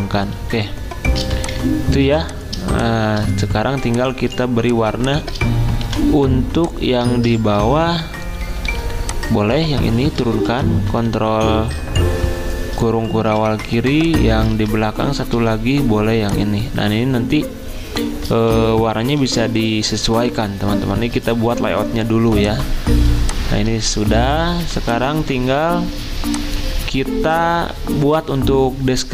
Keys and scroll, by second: 0.5-2.0 typing, 4.9 v, 7.1 ctrl+z, 8.6 i, 10.6 ctrl+[, 10.9 ctrl+[, 11.0 ctrl+[, 13.3 v, 14.5 ctrl+z, 15.3 i, 18.5 ctrl+[, 18.7 ctrl+[, 19.2 ctrl+[, 19.5 ctrl+[, 21.1 z, 23.1 i.